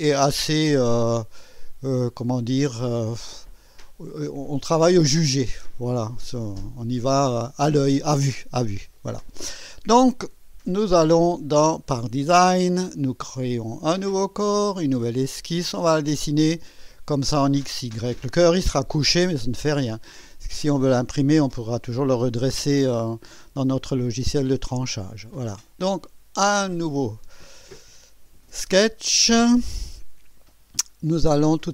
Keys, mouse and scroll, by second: 1.2 click, 2.7 click, 10.8 click, 11.7 click, 13.4 click, 14.3 click, 16.5 click, 25.7 click, 28.0 scroll up 2, 29.2 scroll down 2.